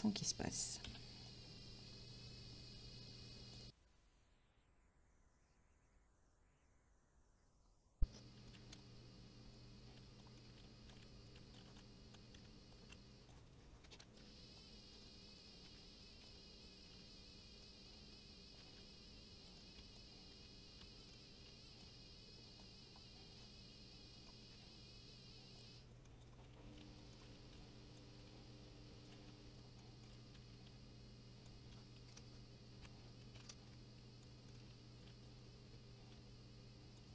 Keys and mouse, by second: 1.0 c, 1.4 click, 4.0-6.4 typing, 4.1 click, 4.4 right click, 4.5 middle click, 5.0 click, 5.7 click, 6.1 click, 6.7 click, 7.5 shift+click, 8.4 middle click, 8.5 right click, 8.7 c, 8.8 click, 9.5 right click, 9.7 middle click, 10.0-12.9 typing, 10.4 middle click, 10.9 click, 11.2 click, 11.5 click, 12.1 shift+click, 12.7 shift+click, 13.3 shift+click, 13.6 middle click, 13.9 right click, 14.0 c, 14.0 click, 14.1 right click, 14.2 middle click, 14.4 g, 14.5 click, 14.8 middle click, 15.1 middle click, 15.8 s, 16.2 click, 16.3 g, 16.7 click, 17.0 Tab, 17.1 middle click, 17.8 middle click, 18.1 Tab, 18.3 middle click, 18.5 right click, 18.7 c, 18.8 click, 19.5 right click, 19.5 middle click, 19.8-21.9 typing, 19.9 click, 20.1 middle click, 20.7 click, 21.0 click, 21.1 middle click, 21.8 click, 22.6 shift+click, 22.9 middle click, 23.1 right click, 23.6-29.2 typing, 24.1 right click, 24.2 middle click, 24.7 click, 25.6 right click, 25.9 click, 25.9 middle click, 26.2 click, 26.3 middle click, 26.8 click, 27.0 click, 27.1 middle click, 27.5 click, 27.9 click, 29.0 shift+click, 29.5 shift+click, 29.8 middle click, 30.0 middle click, 30.1 right click, 30.6 c, 30.7 click, 31.5 right click, 31.9 s, 32.0 KP_9, 32.2 Return, 32.8 ctrl+z, 33.3 r, 33.4 KP_9, 33.5 Return, 34.0 g, 34.2 click, 34.3 middle click, 35.0 click, 35.1 g, 35.2 click, 35.4 middle click, 35.7 g, 36.0 click, 36.2 s, 36.9 click.